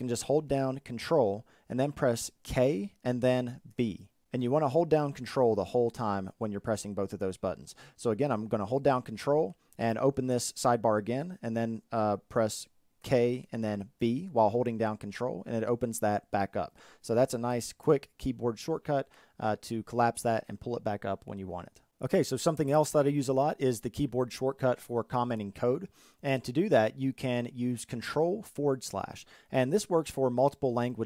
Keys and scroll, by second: 1.0 ctrl+k, 1.0 ctrl+b, 27.8 ctrl+/.